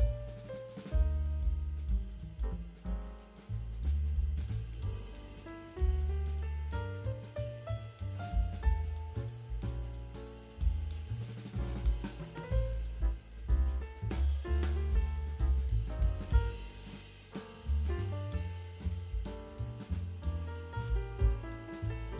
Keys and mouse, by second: 0.0 click, 0.4 click, 1.0 click, 1.1 click, 1.3 click, 1.5 click, 2.3 click, 2.8 click, 3.0 click, 3.3 ctrl+z, 3.5 click, 3.7 middle click, 3.9 click, 4.2 click, 4.4 click, 4.7 click, 4.8 middle click, 5.2 click, 5.4 click, 6.3 click, 6.6 ctrl+z, 6.7 click, 7.0 ctrl+z, 7.1 click, 7.5 middle click, 7.8 click, 8.0 click, 8.3 click, 8.5 ctrl+z, 8.7 click, 8.9 middle click, 9.2 click, 9.9 click, 10.0 click, 10.3 click, 10.9 click, 11.2 click, 11.5 ctrl+z, 11.8 click, 12.2 click, 12.6 ctrl+z, 12.6 click, 12.8 click, 12.9 click, 13.2 click, 13.5 click, 13.8 ctrl+z, 14.2 click, 14.5 ctrl+z, 14.6 click, 14.8 ctrl+z, 14.9 click, 15.3 click, 15.8 middle click, 16.0 click, 16.3 click, 16.6 click, 16.8 click, 17.0 middle click, 17.2 click, 17.4 click, 17.6 click, 17.7 middle click, 17.9 click, 18.1 click, 18.2 click, 18.4 click, 18.8 click, 19.1 click, 19.7 click, 19.9 click, 20.3 click, 20.8 middle click, 21.1 middle click, 21.9 click, 22.1 click.